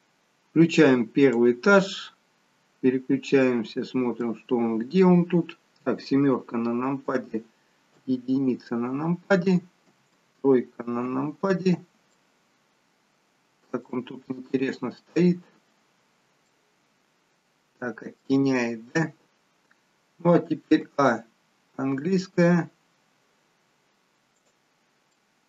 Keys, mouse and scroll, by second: 1.2 click, 4.2 middle click, 5.8 KP_7, 7.9 KP_1, 9.9 KP_3, 12.1 middle click, 14.5 KP_1, 16.5 middle click, 18.9 KP_1, 20.8 a, 24.4 click, 25.0 middle click.